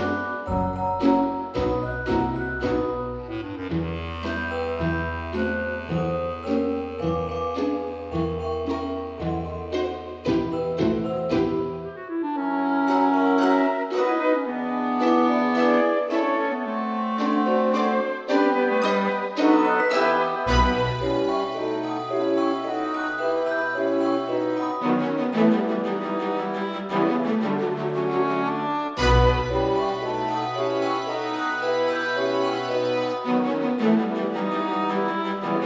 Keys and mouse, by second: 0.3 middle click, 0.9 e, 3.6 click, 3.9 Tab, 4.7 click, 7.1 click, 7.8 right click, 8.6 click, 9.7 click, 12.0 click, 13.4 click, 14.0 click, 20.3 click, 21.1 KP_0, 21.4 KP_Decimal, 21.7 KP_0, 23.5 click, 24.3 KP_0, 24.6 KP_Decimal, 25.1 KP_0, 25.6 KP_5, 28.1 a, 28.6 g, 28.8 z, 30.7 click, 31.9 shift+middle click, 34.3 shift+right click, 35.2 shift+a.